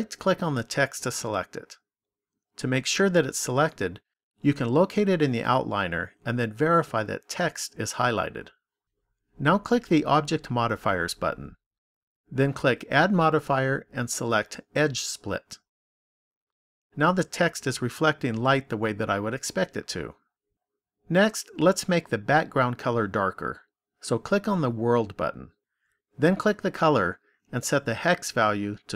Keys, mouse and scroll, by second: 4.9 click, 10.2 click, 13.2 click, 24.0 click, 27.6 click.